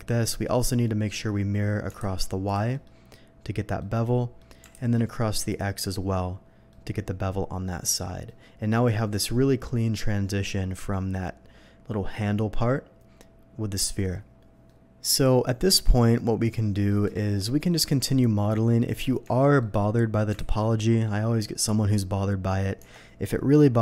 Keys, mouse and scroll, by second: 0.0-1.1 middle drag, 2.0 alt+x, 2.5 alt+x, 2.5 click, 2.7 middle click, 3.8 middle click, 4.7 alt+x, 5.5 click, 6.7-8.0 middle drag, 8.2-8.7 middle drag, 10.9 middle drag, 14.6-15.1 middle drag, 16.0 click, 16.4 click, 16.9 middle drag, 17.7 middle drag, 19.3 Tab, 19.6 middle click, 20.4 alt+a, 22.8 Tab.